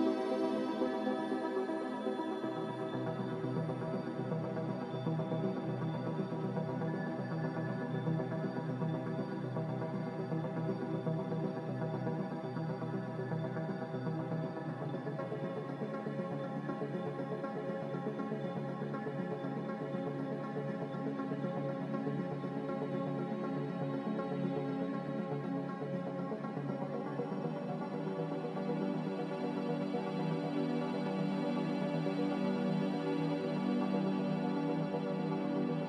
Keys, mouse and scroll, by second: 1.5 1, 1.7 Return, 4.9 Delete, 9.5 g, 15.8 z, 19.2 z.